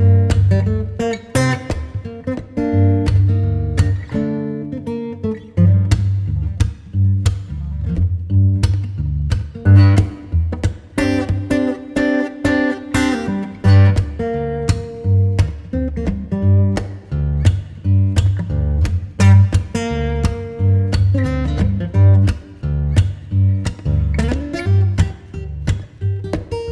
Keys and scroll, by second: 15.3 alt+shift+Return, 16.0 Return.